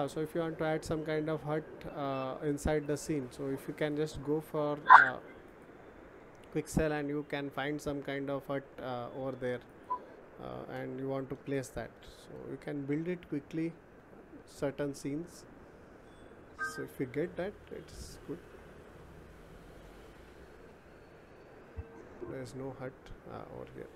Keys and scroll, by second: 12.2 Return.